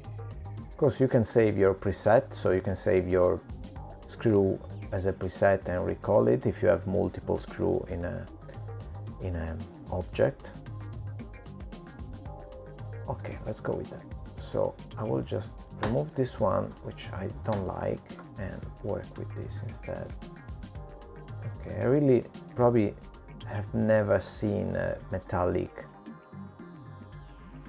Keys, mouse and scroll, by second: 0.9-2.0 scroll up 3, 2.0 click, 4.4 middle click, 7.7 middle click, 12.2 middle click, 14.9 middle click, 16.5 click, 18.7 click, 19.7 BackSpace, 20.7 Delete, 20.7 click, 21.7 click, 23.7 click, 24.6 click, 26.2 middle click.